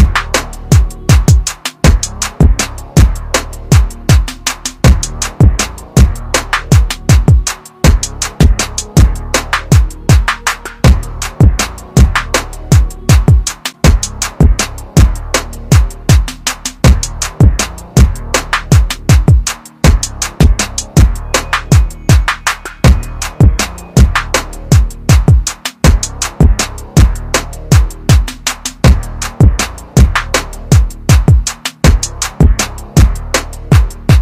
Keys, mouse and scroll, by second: 10.9 scroll up 1, 12.1 click, 15.4 shift+click, 18.2 click, 24.7 click, 28.4 shift+click, 30.4 click, 32.1 click, 33.5 click.